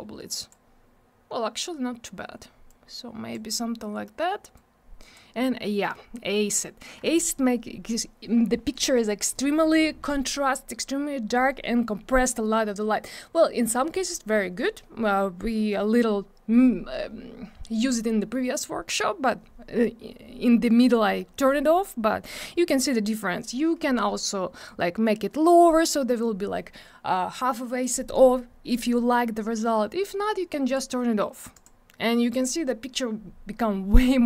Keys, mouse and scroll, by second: 2.7 click, 4.5 click, 24.6 click, 30.7 click, 31.5 click.